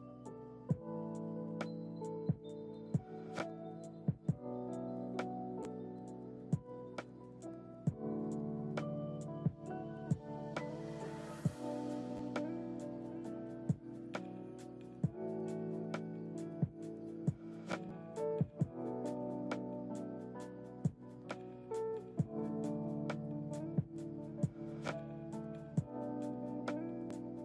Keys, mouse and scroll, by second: 0.3-4.0 drag, 4.0 space, 5.4 click, 6.7 click, 7.7-13.4 drag, 14.0 space, 15.0 click, 16.3 click.